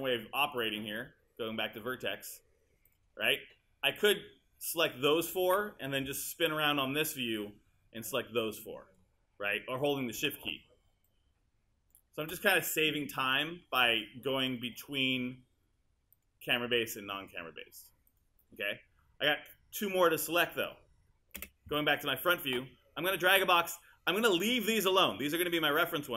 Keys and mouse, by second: 9.0 click, 21.4 space.